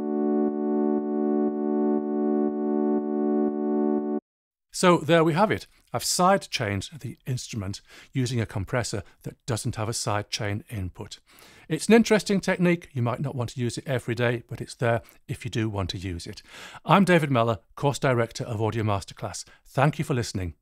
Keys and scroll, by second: 4.1 space.